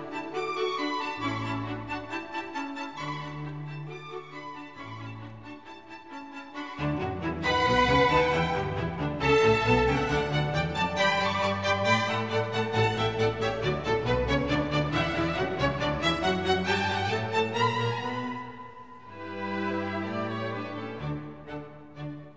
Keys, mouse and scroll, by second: 4.4 click, 5.5-7.7 drag, 9.1-10.8 drag, 15.4-16.4 drag, 19.5-21.9 drag.